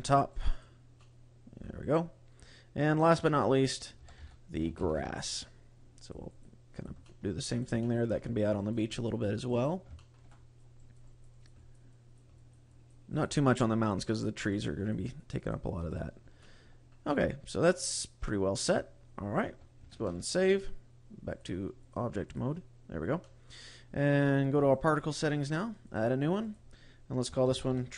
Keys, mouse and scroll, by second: 0.0 click, 0.2 click, 0.4 click, 0.9 middle click, 2.7 click, 3.5 click, 5.9 click, 6.2 click, 6.7 click, 6.9 middle click, 7.4 click, 7.7 shift+middle click, 8.1 click, 8.5 click, 8.8 click, 9.3 click, 9.6 scroll down 2, 9.8 shift+middle click, 10.2 click, 10.7 click, 11.1 click, 11.3 click, 11.5 click, 11.9 click, 12.3 click, 12.7 click, 13.0 click, 13.5 click, 14.0 click, 14.4 click, 14.7 click, 15.1 click, 15.3 click, 15.7 click, 15.8 click, 16.3 middle click, 18.1 click, 19.3-19.7 scroll up 2, 19.8 ctrl+s, 21.2 click, 21.9 click, 22.8 scroll down 2, 23.1 middle click, 24.4 click, 25.0 scroll up 1, 25.7 click, 26.3 click.